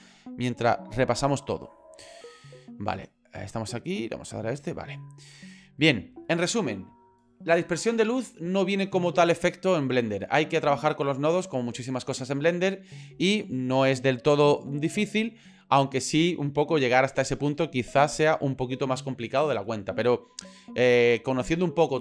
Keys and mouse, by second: 0.3-1.4 shift+middle drag, 2.4 shift+middle click, 4.1 click, 5.3 shift+middle click, 17.9 click.